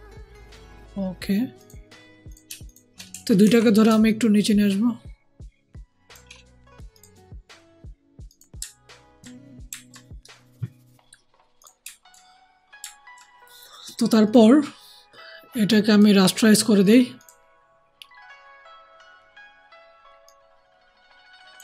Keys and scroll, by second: 3.3 ctrl+shift+t.